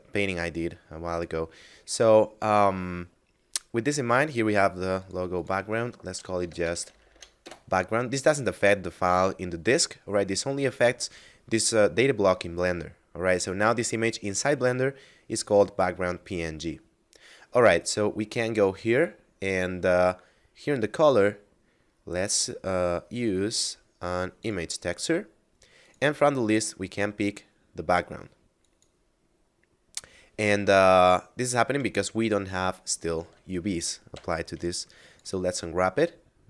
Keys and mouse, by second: 4.6 click, 6.0 BackSpace, 7.2 Return, 12.2 middle click, 20.6 click, 24.0 click, 28.3 click, 32.2 Tab, 32.7 a, 33.5 u, 34.6 click.